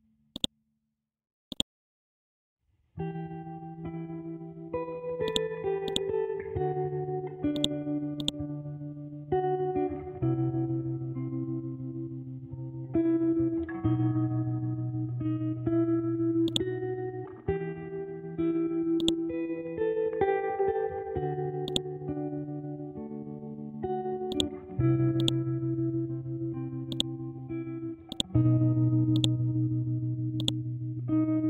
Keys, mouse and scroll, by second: 1.0 ctrl+z, 1.5 click, 2.3-3.4 scroll up 1, 3.4 ctrl+scroll up 1, 3.7 ctrl+Home, 4.7-5.3 scroll down 1, 5.3 click, 6.6-7.5 scroll up 1, 7.5 shift+click, 16.4 click, 17.5 scroll down 1, 19.0 click, 19.8-21.6 scroll up 1, 21.8 click, 24.3-31.4 drag.